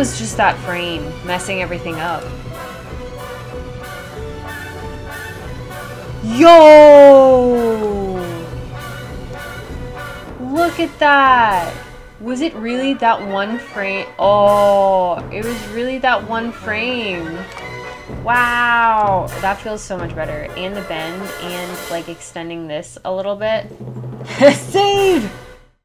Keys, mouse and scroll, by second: 8.6-12.9 drag, 18.5 space.